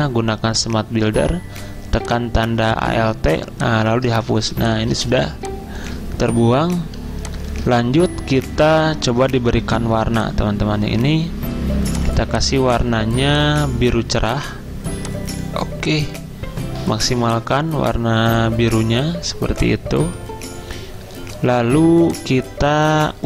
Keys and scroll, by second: 4.4 v.